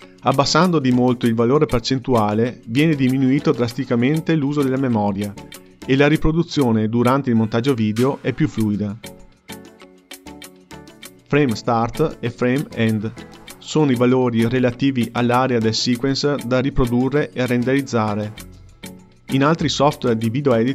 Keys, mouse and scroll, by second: 0.0-1.1 drag, 1.1 KP_0, 2.1 space, 5.7 space, 6.5-8.2 drag, 8.2 space, 10.6 space, 12.1-13.7 drag, 14.2-15.7 drag, 17.8-19.4 drag.